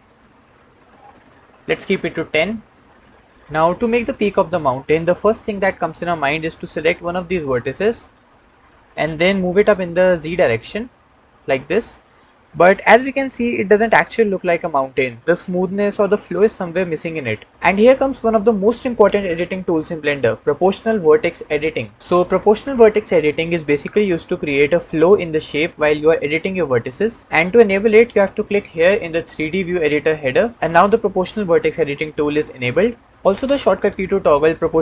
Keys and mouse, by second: 0.2 click, 0.6 click, 0.9 click, 1.1 click, 7.8 click, 9.7 g, 10.0 z, 11.4 g, 11.4 z, 13.2-15.0 middle drag, 30.2 click.